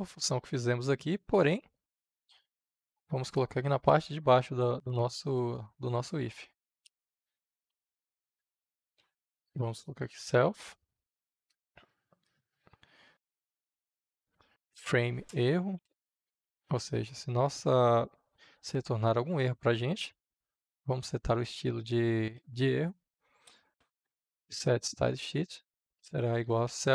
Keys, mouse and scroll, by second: 5.1 Return, 8.6 s, 9.9-11.4 typing, 13.6-14.8 typing, 15.2 Return, 16.7 shift+., 20.2-21.5 typing, 23.7 s, 24.0 t, 24.6 Return, 25.5-26.9 typing.